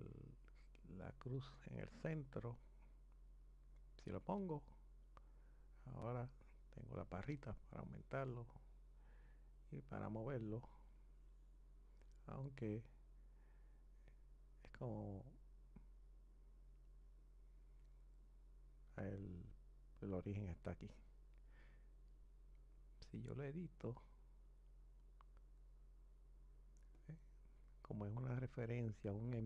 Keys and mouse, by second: 5.0-7.1 drag, 13.2 click, 17.4 click, 22.2 click, 26.7 click, 29.3 click.